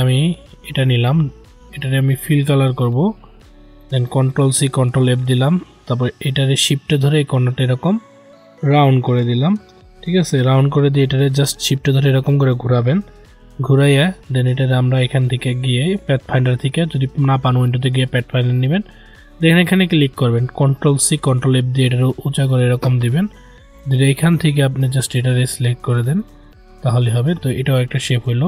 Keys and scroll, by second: 4.2 ctrl+c, 4.6 ctrl+f, 20.7 ctrl+c, 21.1 ctrl+f.